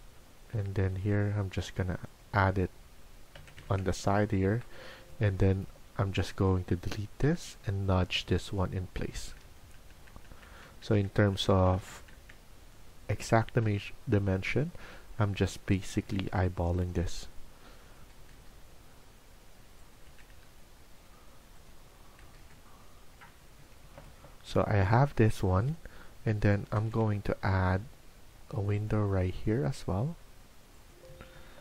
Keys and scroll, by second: 11.7 Delete, 11.7 Left, 11.8 Left, 12.1 Left, 13.2 Left, 13.4 Left, 15.8 Left, 16.2 Left, 17.8 Right, 18.1 Right, 18.2 Right.